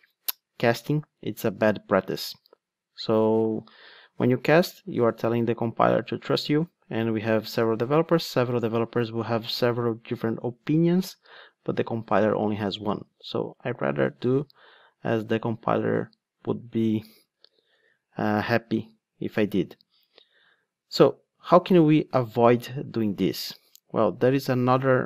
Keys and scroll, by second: 17.7 super+x.